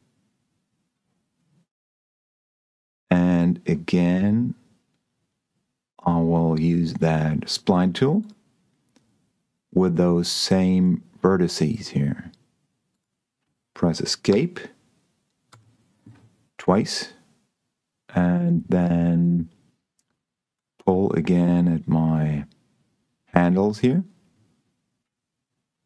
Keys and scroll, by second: 14.6 Escape.